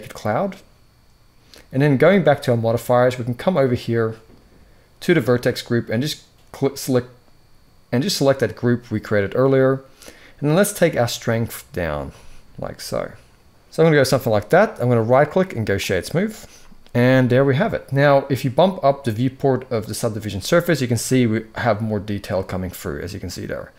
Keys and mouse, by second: 5.0-8.3 drag, 10.5-13.7 drag, 14.8-15.6 right drag, 19.6 click.